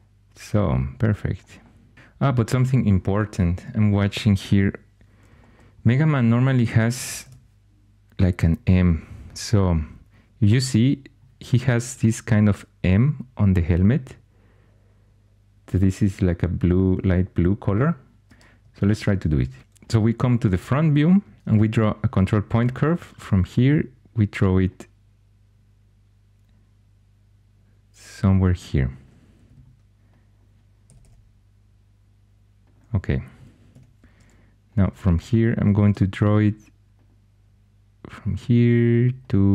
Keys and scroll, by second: 7.1 shift+super+e, 18.7 super+Tab, 19.6 Escape, 21.4 ctrl+super+c, 29.4 1, 30.8 typing, 33.3-33.6 typing, 35.7 ctrl+super+c.